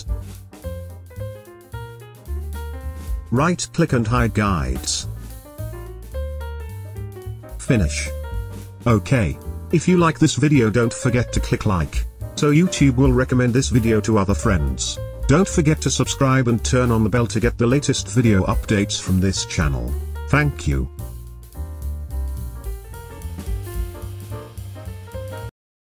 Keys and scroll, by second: 6.9 space.